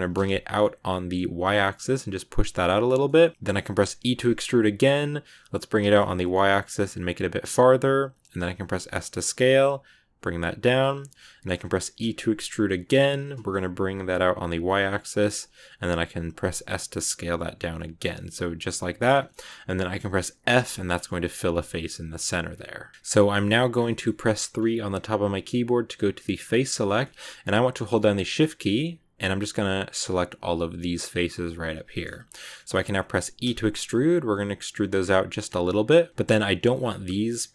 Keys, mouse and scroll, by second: 2.9 middle click, 3.3 g, 17.9 scroll down 1, 18.0 middle click, 19.0 scroll up 3, 19.2-20.5 middle drag, 20.5 f, 20.8 scroll down 1, 21.0 middle click, 21.4 Tab, 21.5-23.6 middle drag, 23.6 scroll down 2, 23.8 middle click, 24.2-24.8 scroll up 3, 24.8 3, 26.9-28.1 shift+middle drag, 28.1 right click, 29.1 shift+right click, 29.9 shift+right click, 30.8 shift+right click, 31.8 scroll down 2, 32.0 middle click, 32.4 scroll up 1, 32.6 middle click, 33.3 e, 36.1-37.5 scroll up 1.